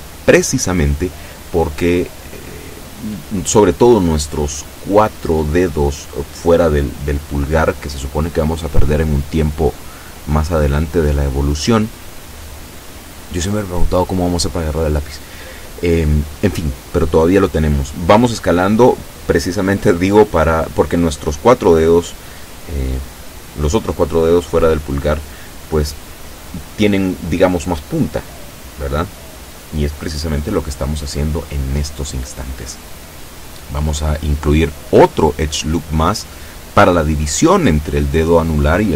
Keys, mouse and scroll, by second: 0.1 b, 0.5 click, 1.4-2.6 drag, 5.6 b, 6.0 click, 7.1 e, 8.7 click, 9.6 a, 9.9 b, 10.3 click, 11.4-13.0 drag, 13.5-15.0 drag, 15.2-16.3 shift+middle drag, 17.5 b, 18.0 click, 18.9 e, 21.0 click, 21.7 s, 23.1 click, 24.3 s, 25.3 Escape, 26.4 a, 26.7 b, 27.4 click, 28.2-29.2 drag, 29.6-31.6 drag, 34.2 ctrl+r, 34.8 click, 38.4 click.